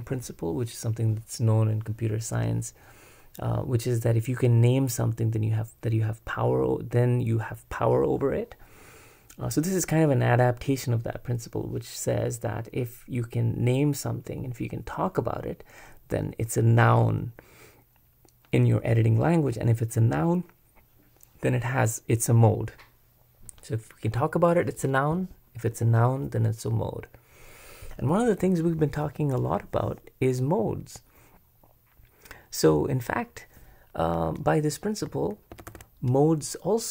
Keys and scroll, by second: 35.5 super+b, 35.7 super+b.